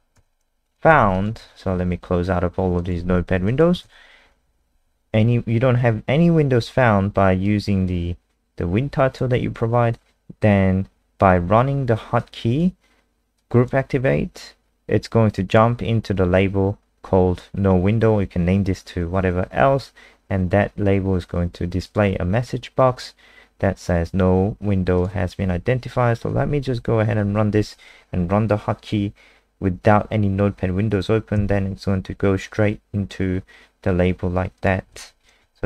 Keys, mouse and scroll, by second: 0.1 ctrl+s, 0.7 click, 0.9 alt+F4, 1.1 click, 1.5 alt+F4, 2.8 click, 3.1 alt+F4, 3.5 click, 3.8 ctrl+s, 7.4 click, 31.3 KP_0, 34.6 click, 34.9 click, 35.4-35.6 typing.